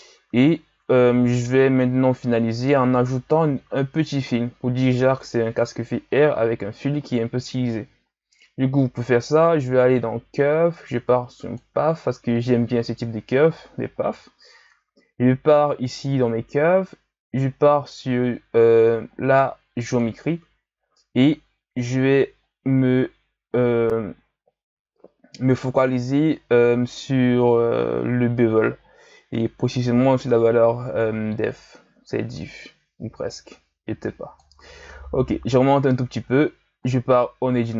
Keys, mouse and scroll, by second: 1.2 shift+a, 15.9 click, 17.5-19.9 scroll down 4, 19.9-20.8 drag, 20.8-22.5 scroll down 4, 22.6-25.6 scroll down 3, 31.5-34.5 drag, 35.0-36.3 scroll down 1, 36.3 Tab.